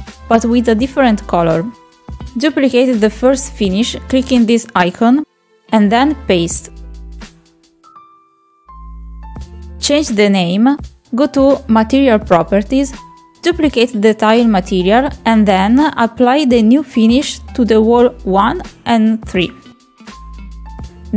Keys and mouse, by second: 3.5 click, 4.6 click, 5.0 click, 6.6 click, 7.3-9.7 drag, 18.7 click, 19.2 click.